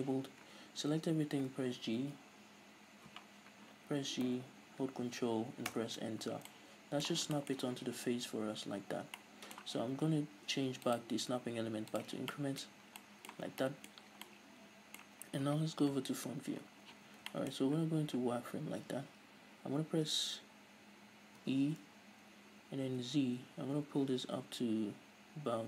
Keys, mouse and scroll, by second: 0.7 a, 4.2 g, 5.8 ctrl+Return, 6.5-10.9 middle drag, 7.2 scroll down 2, 8.3-9.2 scroll down 2, 10.9-12.3 drag, 12.3-14.3 middle drag, 12.7-13.0 scroll up 2, 13.5 scroll down 2, 14.0 scroll up 2, 15.3 scroll down 1, 15.9 KP_1, 16.6-16.9 scroll up 1, 16.9 z, 17.0-21.4 shift+middle drag, 17.6-18.3 scroll up 2, 18.3-20.0 scroll up 1, 20.0-21.2 scroll up 1, 21.2 scroll up 1, 21.4 e.